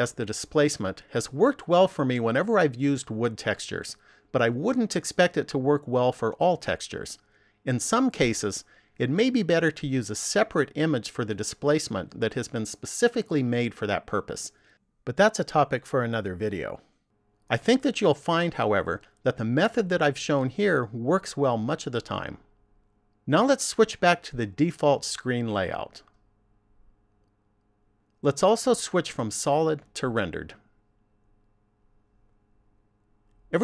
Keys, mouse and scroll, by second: 27.3 click, 28.8 click, 31.0 click.